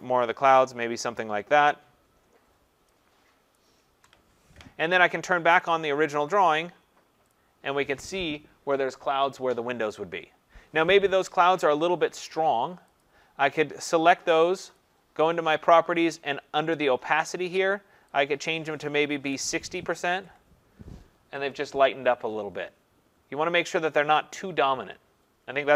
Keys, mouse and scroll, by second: 0.6 click, 3.6 shift+click, 5.7 click, 7.3 click, 13.0 click, 14.8 click, 16.9 click, 18.5 click, 18.9-19.8 typing, 20.1 Tab, 23.7 click.